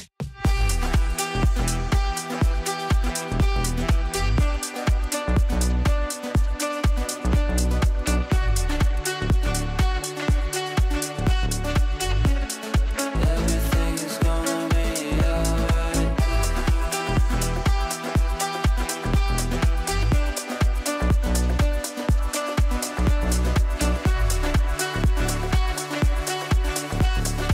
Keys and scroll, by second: 14.4 Delete, 18.6 shift+F2, 18.9 Escape, 24.4 g.